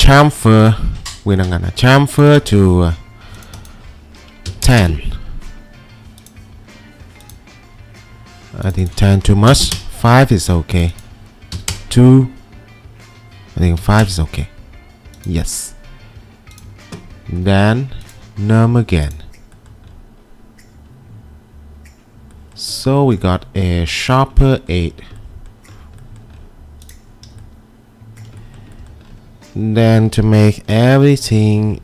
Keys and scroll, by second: 4.2-5.2 typing, 9.5 5, 9.7 Return, 11.6 2, 11.7 Return, 13.8 5, 14.1 Return, 19.0 typing, 31.5 ctrl+2.